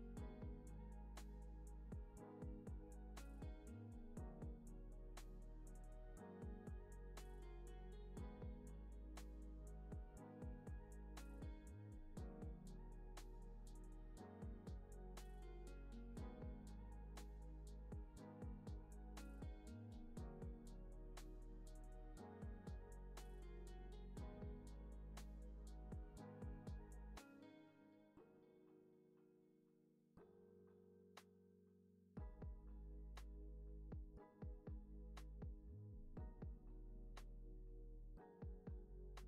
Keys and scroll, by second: 4.9 super+c, 5.2 super+v, 5.6 super+c, 5.9 super+v, 6.5 alt+x, 9.4 alt+z, 17.5 Down, 22.6 super+c, 22.8 super+v, 23.3 super+c, 23.5 super+v, 24.6 alt+z, 26.4 super+c, 26.6 super+v, 27.4 super+c, 27.6 super+v, 28.1 super+c, 28.4 super+v, 28.7 super+s, 29.8 alt+q, 33.7 alt+w, 37.1 n, 38.3 super+s.